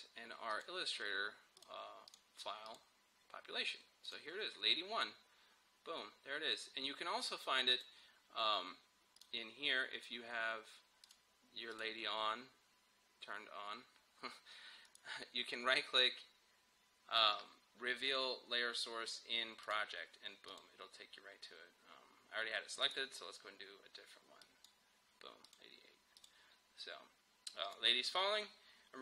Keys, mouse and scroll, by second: 7.8 click, 9.8 scroll down 1, 11.1 click, 14.9 right click, 19.7 click, 22.9 right click, 24.5 click.